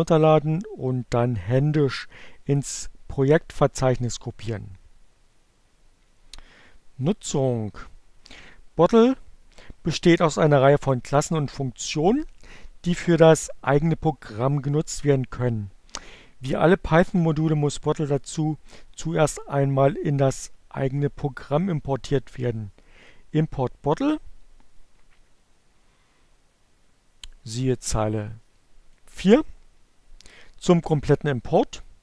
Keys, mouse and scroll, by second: 27.0-28.1 drag.